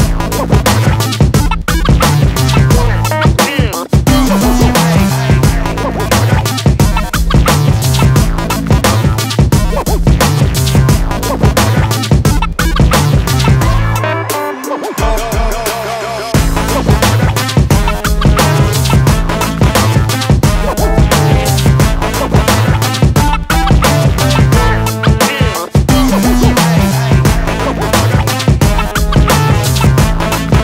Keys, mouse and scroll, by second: 0.2 middle click, 2.4 middle click, 8.2 click, 9.6 KP_2, 10.7 KP_1, 12.1 KP_7, 13.0 KP_1, 13.7 KP_4, 15.2 KP_5, 15.9 KP_6, 18.8 shift+right click, 19.6 shift+a, 22.3 s, 24.0 KP_7, 25.4 s, 27.2 g.